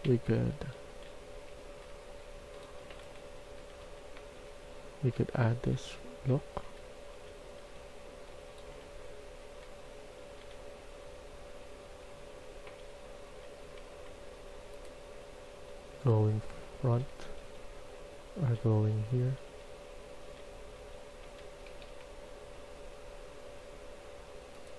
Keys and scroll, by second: 0.0-10.9 typing, 12.3-13.3 typing, 15.4-21.7 typing.